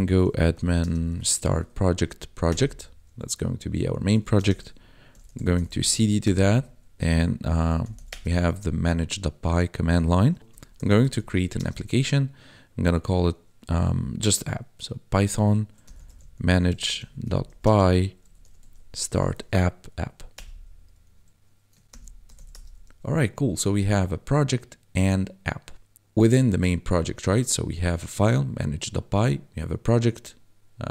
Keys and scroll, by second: 0.0-1.2 typing, 1.9 Down, 2.4 Return, 4.1-5.9 typing, 6.2 Return, 7.8 l, 7.9 s, 8.1 Return, 10.5 p, 11.0 h, 11.3 n, 11.6 space, 15.8-19.1 typing, 19.8 Down, 20.3 Return, 21.8 ctrl+l, 22.3 s, 22.5 Return.